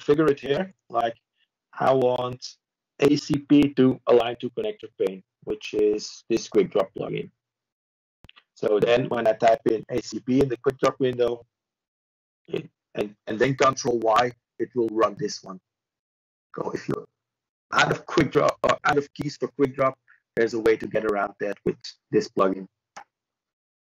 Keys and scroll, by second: 0.1-0.9 typing, 6.6 ctrl+space, 8.0 typing, 10.5 typing, 11.7 ctrl+q, 14.6 ctrl+space, 15.6 typing, 18.0 ctrl+b, 18.6-19.4 typing, 20.4 ctrl+space, 21.2 ~, 23.4 ctrl+q.